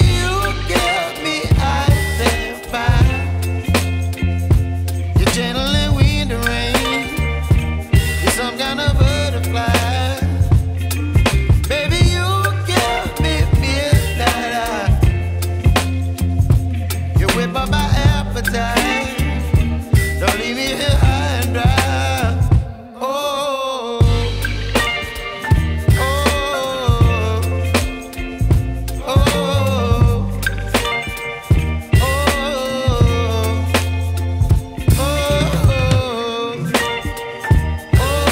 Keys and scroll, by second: 0.5 x.